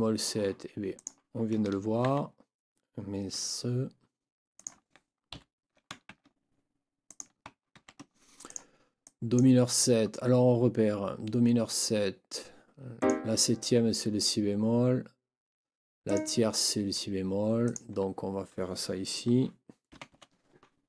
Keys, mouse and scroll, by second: 0.9 click, 2.1 ctrl+c, 4.5 click, 5.3 shift+Down, 6.1 ctrl+shift+c, 7.1 click, 7.7 ctrl+v, 8.5 click, 9.0-9.5 drag, 13.0 click, 16.1 click, 17.7 click, 19.9 n, 20.1 KP_7.